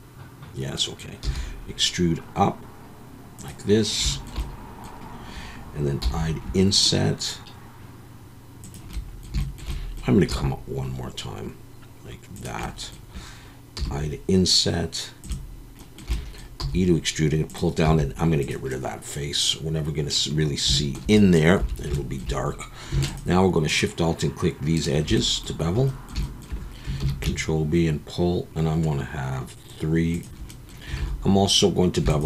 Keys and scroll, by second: 1.2 e, 6.0 i, 10.3 e, 13.7 i, 16.6 e, 17.8 x, 21.6 2, 27.0 ctrl+b, 31.0 alt+a.